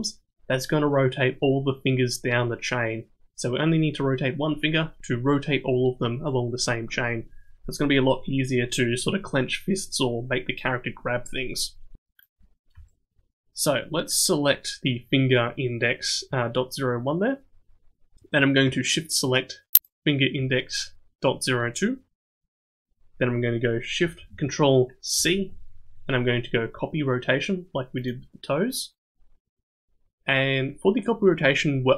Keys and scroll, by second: 25.1 ctrl+shift+c.